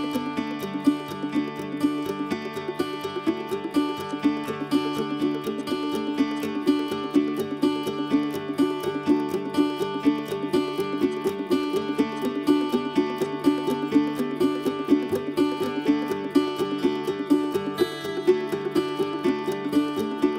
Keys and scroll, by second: 5.2 q, 8.2 m.